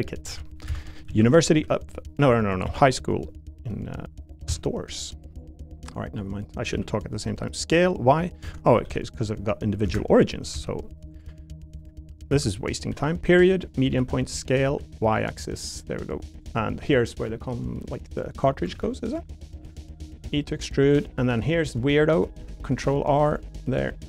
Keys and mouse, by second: 0.0-1.5 typing, 0.7 Escape, 2.2 right click, 2.6 s, 4.5 x, 5.2 right click, 6.7 s, 7.2 y, 8.4 Escape, 8.8 ,, 13.9 ., 13.9 s, 14.1 x, 14.6 y, 15.7 click, 16.0 3, 18.1 click, 18.7 ctrl+r, 19.4 click, 19.6 3, 20.2 e, 20.8 click, 22.4 ctrl+r, 23.2 right click, 23.7 3.